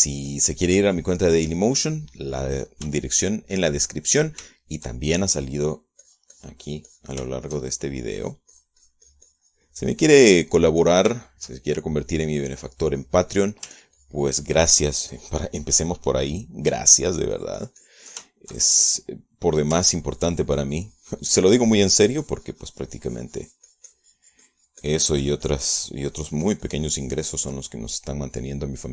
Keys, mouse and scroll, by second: 0.8-4.4 shift+drag, 4.8 shift+middle click, 5.3 shift+middle click, 6.0-7.4 shift+middle drag, 7.6-8.8 drag, 8.8 shift+middle click, 9.8-12.6 shift+drag, 12.8 shift+middle click, 13.8-15.2 shift+drag, 15.3-18.2 ctrl+drag, 18.7-19.8 ctrl+drag, 19.8-21.3 ctrl+shift+middle drag, 21.4-28.9 ctrl+drag.